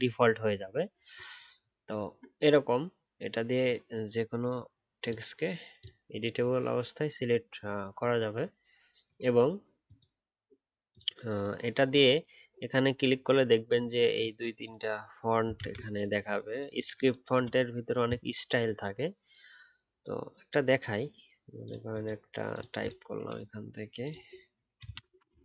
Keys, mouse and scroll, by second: 1.7 alt+scroll down 1, 2.0-4.9 alt+scroll up 1, 15.5 ctrl+z.